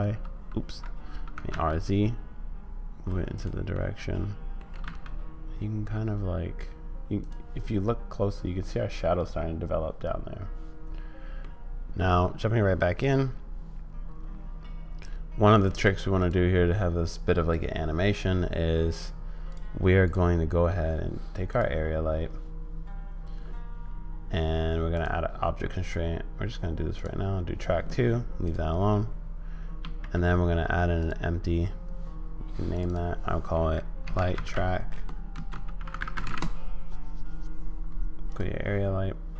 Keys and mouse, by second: 1.3 r, 3.7 middle click, 4.7 g, 11.4 middle click, 13.0 click, 19.5 click, 20.0 click, 25.1-27.1 drag, 29.8 shift+a, 32.8-38.0 drag.